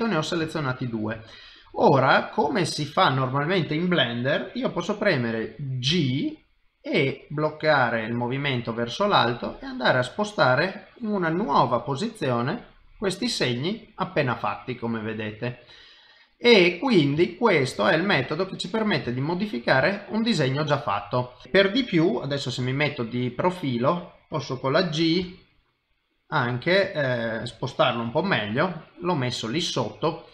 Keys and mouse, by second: 0.7 ctrl+middle click, 1.2 shift+middle click, 1.7 middle click, 2.6 shift+middle click, 11.3 middle click, 17.4 ctrl+middle click, 17.8 shift+middle click, 18.2 middle click, 19.2 ctrl+middle click, 19.9 shift+middle click, 20.9 middle click, 21.4 middle click, 22.6 KP_3, 25.2 g, 28.1 middle click.